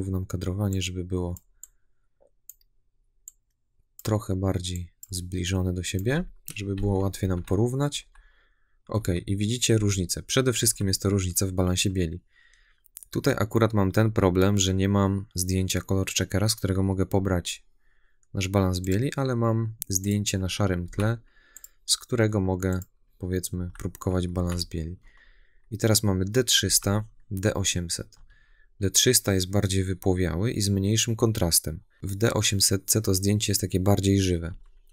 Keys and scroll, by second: 7.1 Right, 23.4 Left, 24.2 Right, 24.9 Left, 26.5 Right, 28.0 Left, 31.9 Right, 34.3 Left.